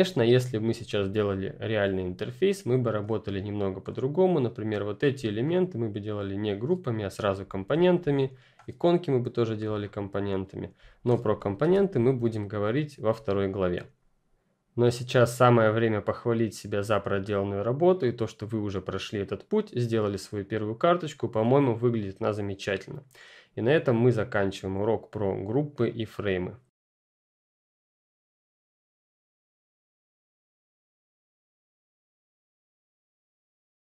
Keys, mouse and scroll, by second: 3.2 click, 5.2 ctrl+scroll up 1, 5.9-7.4 ctrl+scroll down 1, 7.4-8.0 scroll down 2, 8.0 scroll up 1, 8.1 click, 9.9 ctrl+scroll down 1, 11.3 ctrl+click, 11.6 ctrl+0.